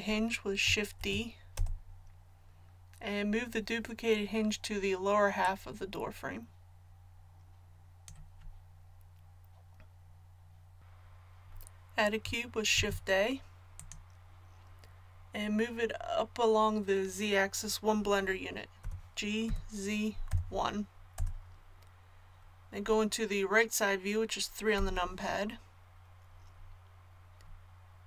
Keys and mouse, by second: 5.4-24.7 drag, 24.7 KP_3.